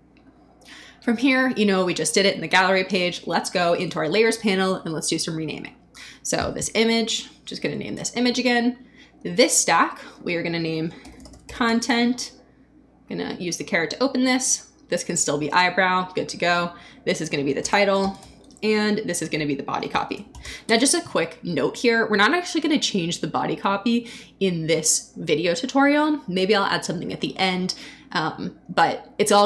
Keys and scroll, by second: 6.9 Right, 7.5 BackSpace, 7.9 Return, 10.7-12.1 typing, 17.3-20.9 typing.